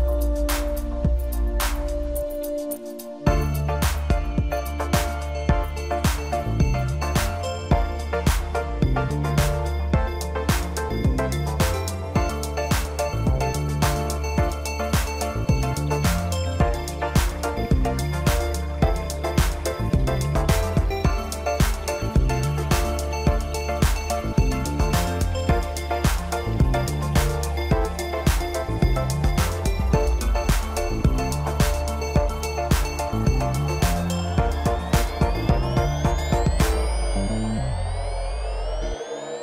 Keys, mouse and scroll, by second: 0.6 click, 9.4-9.9 scroll up 2, 9.9-11.5 middle drag, 11.5-11.9 scroll down 2, 11.9-13.7 middle drag, 13.7-14.4 scroll up 1, 14.4 Tab, 15.2 drag, 16.1 click, 16.5-17.6 middle drag, 17.6 KP_1, 18.4 scroll up 4, 18.9-20.2 middle drag, 20.2-21.3 drag, 26.7 scroll down 2, 28.2-29.3 scroll down 3, 29.8-32.8 drag, 33.2 click, 35.3-35.6 scroll down 1, 35.6-36.1 middle drag, 36.1-37.0 scroll up 1, 37.4 drag.